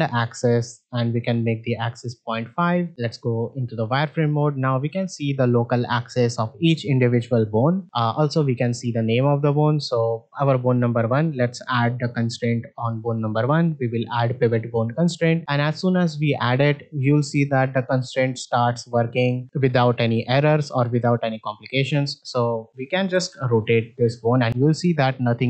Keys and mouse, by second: 0.3-1.9 drag, 2.7 shift+middle click, 2.9 z, 4.7 shift+middle click, 9.3 shift+middle click, 12.4-14.5 drag, 15.4 shift+middle click, 23.0 r.